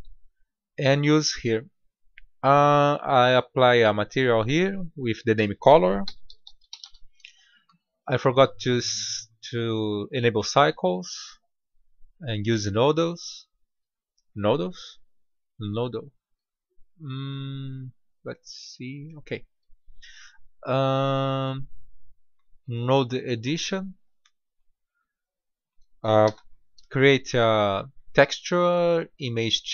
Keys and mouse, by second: 3.4-6.9 drag, 8.1-10.1 drag, 12.2-15.5 drag, 21.5-23.5 drag, 26.2 shift+a.